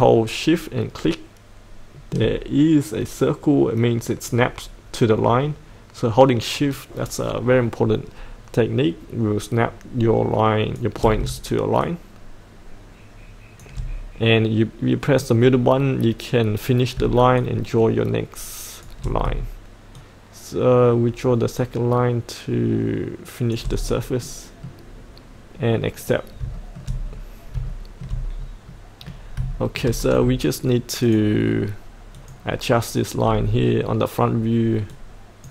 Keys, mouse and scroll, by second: 0.0-10.8 shift+drag, 11.8-13.6 shift+drag, 15.0 middle click, 17.4 shift+click, 20.0-23.5 shift+drag, 24.2-25.4 middle drag, 26.0 click, 26.5 shift+middle click, 27.0-27.6 scroll down 2, 27.6 shift+middle click, 28.3-28.7 scroll up 1, 28.7 middle click, 29.5 shift+middle click, 31.0 click, 33.2-34.9 scroll down 1, 34.9 click.